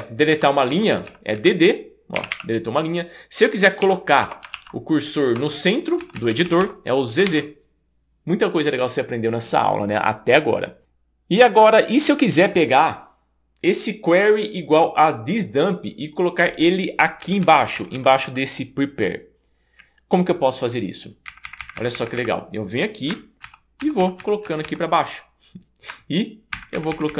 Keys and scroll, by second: 0.2 Down, 0.7 Down, 0.9 Down, 1.1 Down, 1.4 Up, 2.2 d, 2.3 d, 4.2 Return, 4.5 super+s, 5.7 Escape, 6.0 Down, 6.2 Down, 6.3 Down, 6.4 Down, 6.6 Down, 7.1 z, 7.3 z, 17.2 Down, 17.6 Down, 17.7 Down, 17.9 Down, 18.3 Down, 21.3 Up, 21.5 Up, 21.6 Up, 21.8 Up, 21.9 Up, 22.2 Up, 23.5 ctrl+super+Down, 24.6 ctrl+super+Down, 26.5 ctrl+super+Up.